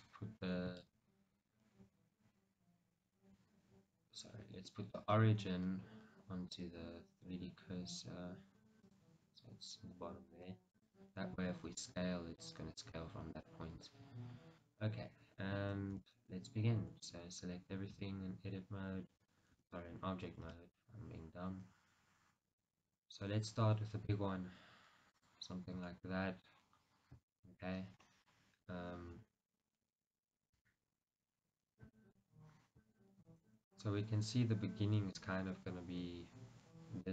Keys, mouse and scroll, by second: 4.9 Escape, 5.1 right click, 9.1-11.0 right drag, 11.0 click, 11.9 s, 13.6 right click, 16.0 Tab, 17.0 a, 18.0 s, 19.4 right click, 19.7 Tab, 20.6 s, 25.5 click, 25.6 scroll down 1, 26.1-32.4 shift+middle drag, 26.5-27.5 scroll up 2, 28.2-30.7 scroll up 2, 30.7 Tab, 31.5-32.1 scroll down 2, 32.4 scroll up 1, 33.3-37.1 middle drag.